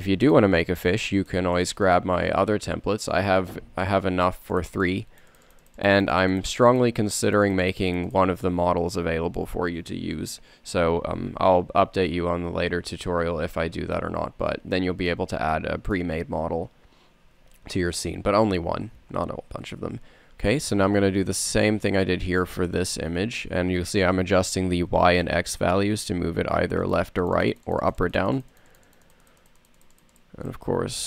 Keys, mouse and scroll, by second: 0.3-3.4 drag, 3.4-5.2 middle drag, 12.3-13.2 middle drag, 20.1 n, 21.2 n, 26.0 click.